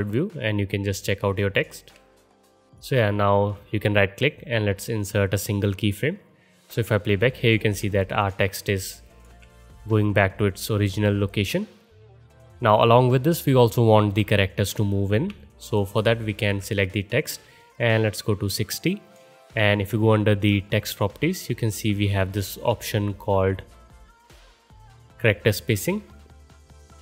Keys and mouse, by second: 2.8-7.5 drag, 9.5-12.3 drag, 10.8 middle click, 10.8 right click, 12.4-15.4 drag, 15.4-17.1 alt+middle drag, 18.2 middle click, 18.6-21.0 drag, 19.2-21.0 middle drag, 19.2-21.0 right drag.